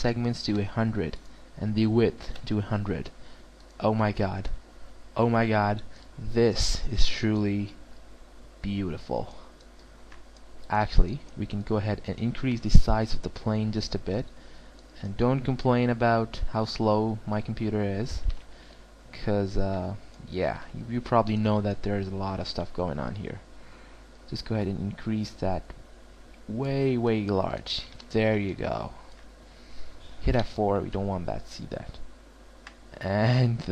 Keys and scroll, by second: 11.9 alt+w, 27.3 alt+w, 30.3 F4.